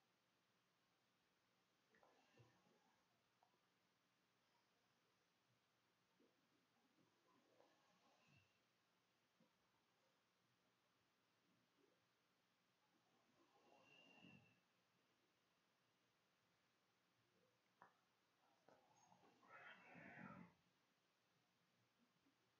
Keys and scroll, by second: 9.3 BackSpace, 9.8 BackSpace, 10.3 BackSpace.